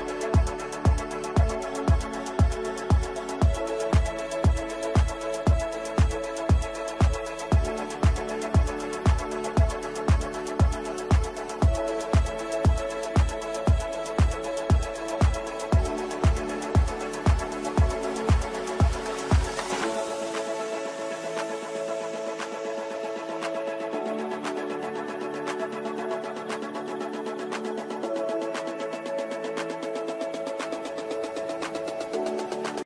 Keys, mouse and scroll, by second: 4.8-5.7 typing, 5.9 F3, 7.5 click, 8.3 shift+F2.